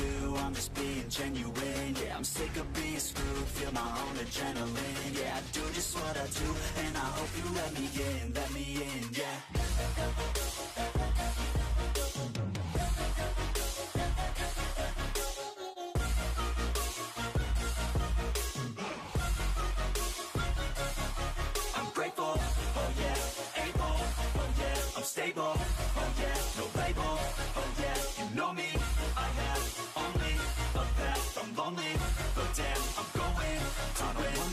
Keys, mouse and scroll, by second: 0.1 click, 0.3 c, 1.3 shift+middle click, 1.6 e, 2.2 r, 2.7 g, 3.4 shift+middle click, 3.7 e, 5.0 r, 5.7 g, 6.6 shift+middle click, 7.1 r, 7.7 e, 8.4 e, 9.5 g, 10.3 s, 11.2 ctrl+r, 12.7 r, 13.2 r, 14.0 ctrl+r, 15.1 ctrl+r, 16.0 scroll down 5, 16.1 shift+middle click, 16.6 scroll up 6, 17.3 click, 17.5 scroll down 3, 17.9 shift+middle click, 18.5 click, 18.9 scroll up 6, 19.1-20.1 shift+middle drag, 20.1-24.1 typing, 24.6 shift+middle click, 24.8-25.4 scroll up 2, 25.4 c, 26.8 e, 27.1 s, 27.8 g, 28.8 e, 30.5 ctrl+z, 30.9 e, 32.4 ctrl+z, 32.4 ctrl+z, 32.6 ctrl+z, 32.9 s, 33.7 e.